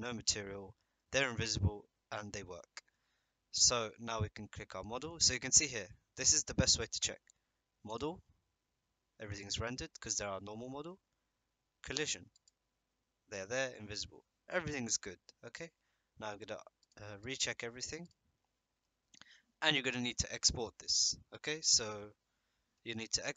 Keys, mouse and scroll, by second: 0.7 middle click, 7.9 click, 9.3-9.7 middle drag, 10.7 middle click, 12.3 click, 16.8 click, 17.2-17.9 drag, 18.0 click, 18.8 middle click.